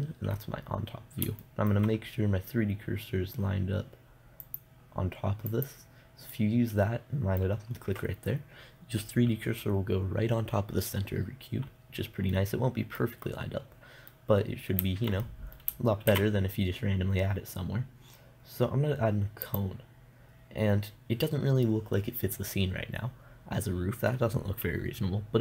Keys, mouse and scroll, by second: 0.0 KP_7, 4.9-7.0 drag, 7.0-11.6 middle drag, 11.9-15.9 middle drag, 16.5 shift+a.